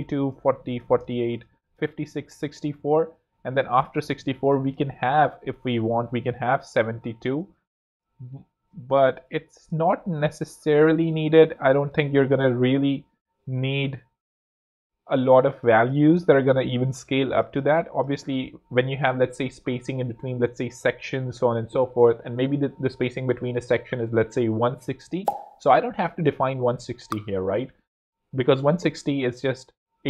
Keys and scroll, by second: 0.9 shift+space, 6.1 super+d, 8.1-9.2 typing, 11.2 7, 11.5 2, 11.9 Return, 15.6 super+z, 16.1 space.